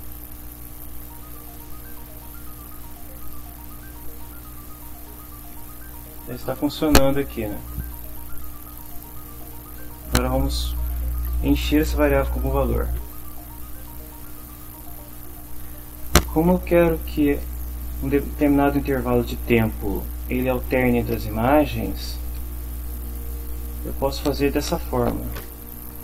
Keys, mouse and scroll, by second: 2.3 scroll down 2, 2.4-2.7 scroll up 2, 2.7-3.2 scroll down 2, 3.4-4.8 scroll up 2, 4.9 middle click, 9.0 click.